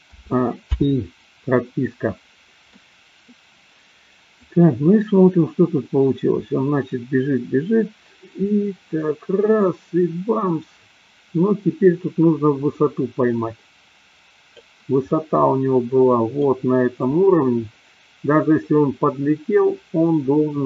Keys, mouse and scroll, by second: 0.2 a, 0.9 i, 2.7 middle click, 4.7-14.9 drag, 15.2-16.5 middle drag.